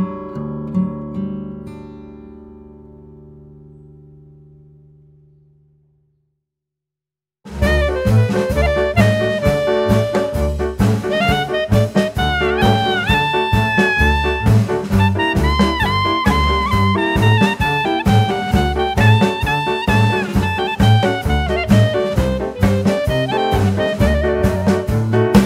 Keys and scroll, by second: 3.7 s, 8.7 KP_1, 9.2 Tab, 9.6 Tab, 10.1 ctrl+r, 11.9 Tab, 12.4 ctrl+r, 13.1 ctrl+r, 15.5 ctrl+r, 15.6 Tab, 15.8 ctrl+r, 18.0 Tab, 19.2 Tab, 19.3 Tab, 19.5 KP_1, 20.4 g, 22.3 shift+a.